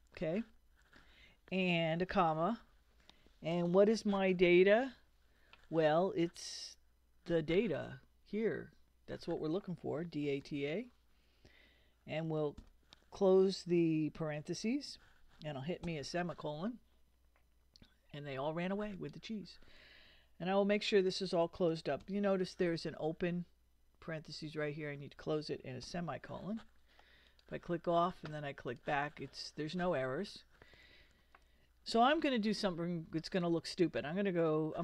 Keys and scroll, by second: 2.0 ,, 9.8-11.0 typing, 12.6 shift+0, 15.8 ;, 22.0 shift+0, 25.8 ;.